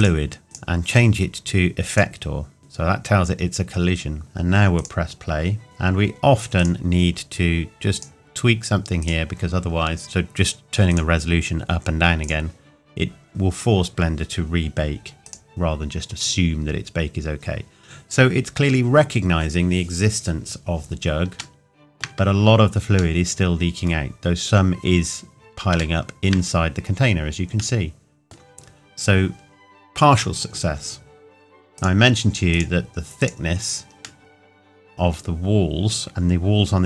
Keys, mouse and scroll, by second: 0.0 click, 4.8 click, 10.9 click, 15.2 click, 18.1-18.4 scroll up 1, 21.4 shift+Num_Lock, 21.4 scroll up 1, 21.6 shift+middle click, 23.5 middle click, 24.8-25.2 scroll up 1, 26.0 shift+middle click, 28.6 scroll down 1, 31.8 click, 34.2 middle click.